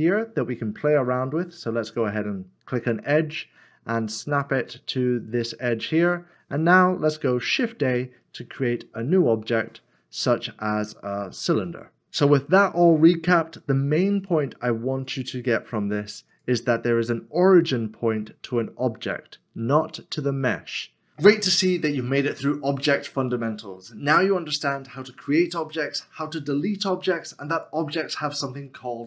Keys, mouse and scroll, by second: 4.3 shift+right click, 7.5 shift+a, 15.6 Delete.